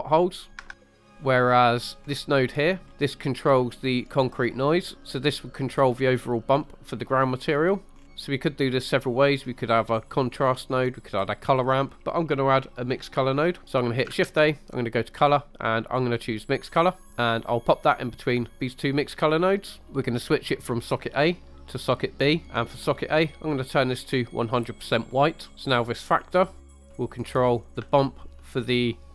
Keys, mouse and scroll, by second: 2.1 click, 2.9 scroll down 2, 8.0-8.4 scroll up 2, 14.3 shift+a, 18.6 click, 20.6 click, 20.7-22.0 drag, 23.3 click, 25.8-27.0 drag, 27.4 scroll down 2, 28.0 shift+middle click, 28.6 scroll up 1.